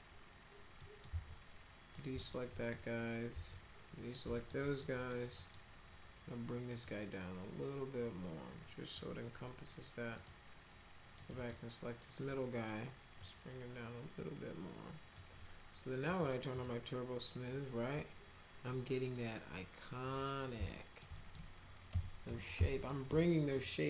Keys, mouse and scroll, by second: 0.8 right click, 1.3 alt+click, 2.2 right click, 2.5 right click, 3.5 alt+click, 4.3 middle click, 4.7 middle click, 5.0 middle click, 5.4 middle click, 6.8-9.0 drag, 10.2 click, 11.2 click, 11.4 click, 13.2-15.2 drag, 16.0 click, 16.5 click, 20.7 alt+middle click, 21.2 middle click, 21.9 F3, 22.3 F3, 22.6 F4, 22.8 click, 23.1 F4, 23.5 click.